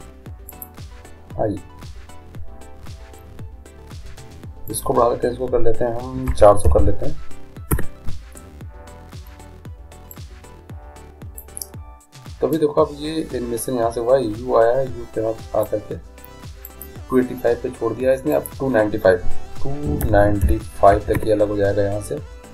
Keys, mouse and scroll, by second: 4.8-6.6 drag, 6.9 0, 10.3-11.9 drag, 12.6-14.2 drag, 16.7-20.2 drag.